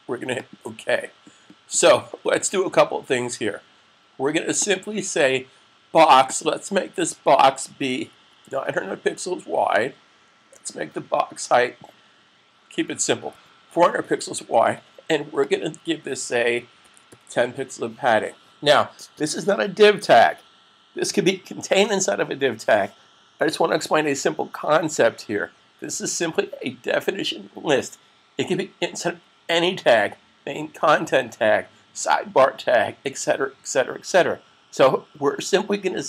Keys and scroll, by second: 8.1-9.4 typing, 13.0-14.0 typing, 16.4-17.1 typing, 19.3-20.0 typing.